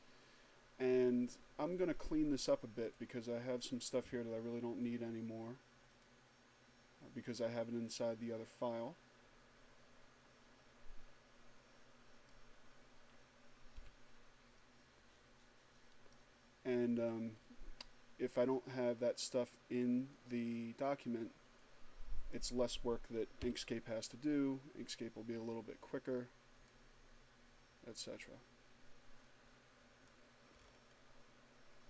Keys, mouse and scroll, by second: 3.1 right click, 6.0 click, 8.5-12.6 drag, 13.6 Delete, 17.6-17.9 scroll down 2, 20.0-22.6 drag, 23.2 Delete, 25.4-27.0 drag, 29.1-30.6 drag, 30.6-31.1 scroll up 1.